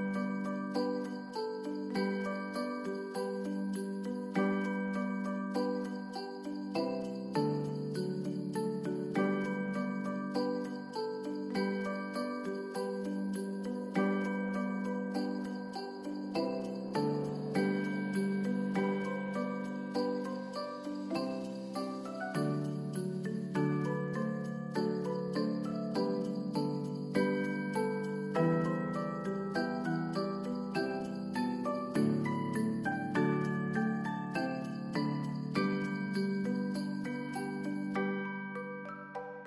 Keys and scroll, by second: 1.2 space, 7.3 s, 9.4 Return, 12.5 space, 17.5 space, 23.7 space, 24.2 ctrl+s, 26.1 Home, 26.5 space, 30.8 space.